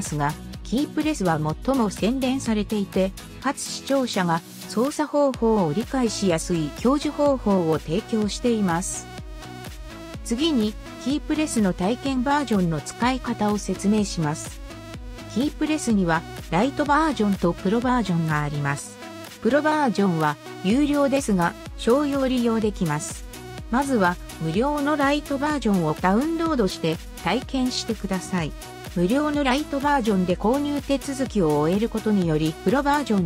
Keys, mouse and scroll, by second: 11.1 Num_Lock, 11.1 click, 15.8 Num_Lock, 15.8 right click, 22.4 Num_Lock, 22.4 right click.